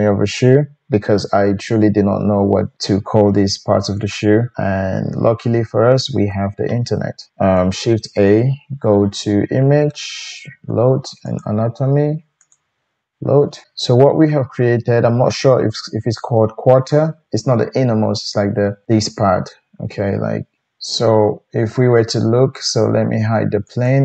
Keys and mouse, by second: 7.3 ctrl+z, 8.3-13.6 drag, 8.3 shift+a, 13.6-23.7 shift+middle drag, 23.7 click, 23.9-24.0 middle drag.